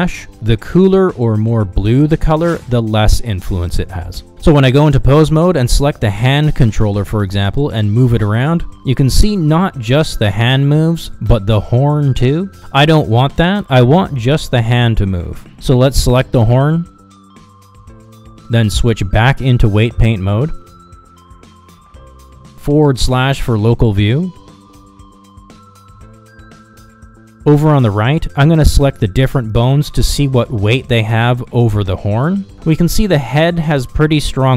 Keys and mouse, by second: 0.5 Down, 1.8 Down, 5.8 middle click, 6.3 shift+middle click, 7.4 ctrl+Tab, 8.7 click, 9.8 click, 10.5 ctrl+Tab, 11.3 r, 15.8 ctrl+z, 18.3-18.7 shift+middle drag, 20.2 middle click, 21.5 ctrl+Tab, 26.7 shift+middle click, 27.0 middle click, 28.3 shift+middle click, 28.6 middle click, 30.5 click, 31.4 middle click, 33.1 Down, 34.3 Down.